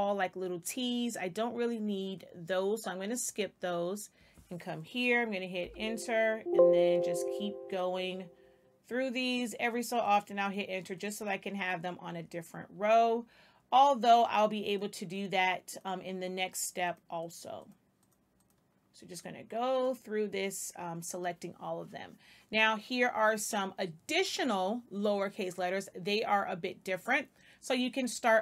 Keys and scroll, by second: 5.5 Return.